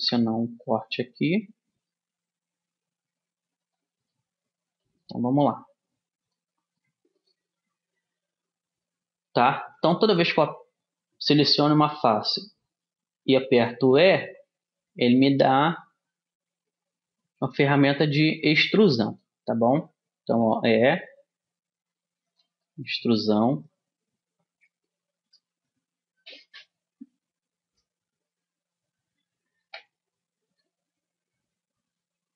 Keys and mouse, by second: 4.2-6.3 middle drag, 6.3 click, 7.3-8.4 middle drag, 10.3-12.1 right drag, 14.1 e, 18.9 middle click, 19.8-21.6 drag, 20.4 e, 22.7-28.1 middle drag.